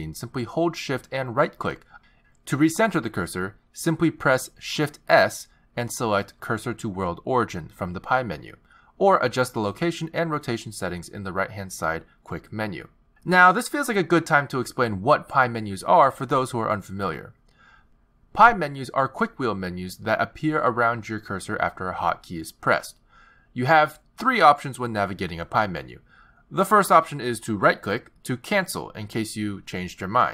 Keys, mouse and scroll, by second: 1.9 shift+right click, 3.4 shift+right click, 5.5 shift+s, 6.2 shift+s, 11.5 click, 12.6 click, 18.4 n, 21.4 t, 26.3 z.